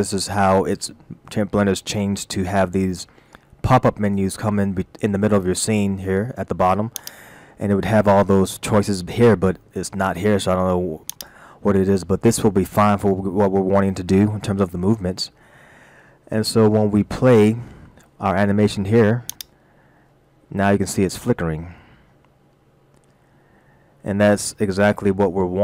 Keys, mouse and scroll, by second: 7.0 click, 11.1 click, 15.0 scroll up 1, 16.4 shift+middle click, 19.3 click.